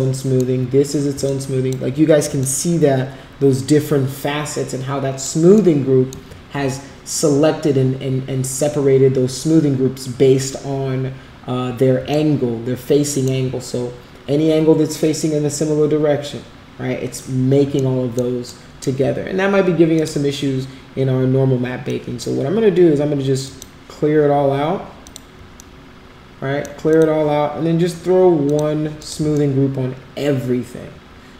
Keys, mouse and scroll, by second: 0.1 alt+middle click, 1.2 alt+click, 2.6-5.2 alt+middle drag, 5.7 alt+middle click, 12.1-13.2 alt+middle drag, 17.8 alt+middle click, 18.4 alt+middle click, 19.9 click, 21.8 click, 23.4 click, 25.0 click, 25.6-26.6 alt+middle drag, 26.8 click, 28.4 click, 29.0 click, 29.3-31.3 alt+middle drag.